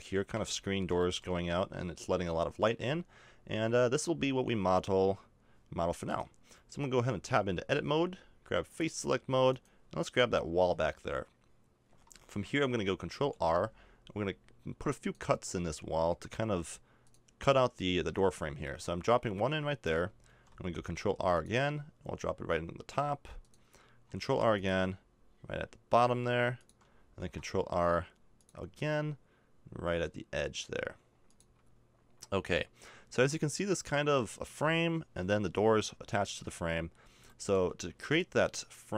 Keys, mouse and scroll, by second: 0.2-1.4 middle drag, 6.8 middle click, 7.1 Tab, 10.6 right click, 10.7-13.2 middle drag, 13.3 ctrl+r, 20.3 ctrl+r, 24.2 ctrl+r, 27.2 ctrl+r, 32.0-38.1 middle drag.